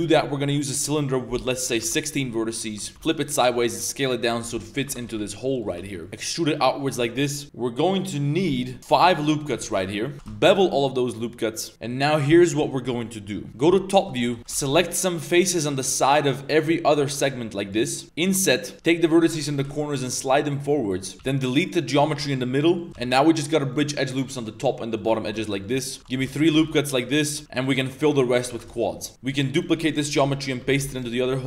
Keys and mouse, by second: 0.9-1.9 drag, 2.2 middle drag, 2.6 Tab, 2.9 r, 3.5 s, 4.5 drag, 4.8 Tab, 5.0 g, 5.7 shift+s, 6.0 click, 6.1 e, 7.1 shift+click, 8.8 ctrl+r, 9.5 shift+click, 9.8 2, 9.9 click, 10.1 ctrl+b, 13.5-14.7 typing, 13.9 shift+middle click, 15.8 b, 17.0 b, 18.0-19.5 typing, 21.1 b, 22.2 x, 22.2 z, 22.3-22.7 middle drag, 22.9 2, 22.9 w, 24.2 middle click, 25.0 click, 25.0 middle click, 25.2 shift+drag, 25.2 shift+middle drag, 25.5 click, 25.5 middle click, 25.8 click, 25.8 middle click, 26.2 ctrl+shift+r, 26.3 shift+s, 27.3 2, 27.4 f, 27.5 click, 27.9 shift+click, 28.1 middle click, 28.5 ctrl+z, 28.7 shift+click, 28.9 f, 29.3 g, 29.7 s, 31.2 shift+n.